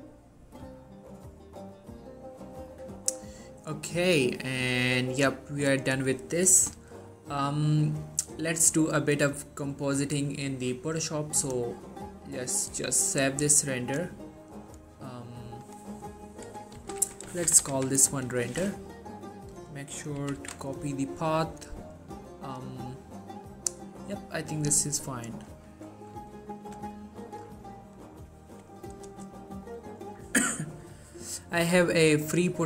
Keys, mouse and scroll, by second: 2.7-4.4 scroll up 1, 4.4 middle click, 5.0-5.3 scroll up 1, 5.3-6.0 middle drag, 8.5-10.3 scroll down 1, 11.5 click, 16.9-17.8 typing, 18.6 click, 20.3 ctrl+c, 20.8 click, 23.0 right click, 24.5 click, 27.3 ctrl+v, 29.2 Return, 29.9 click.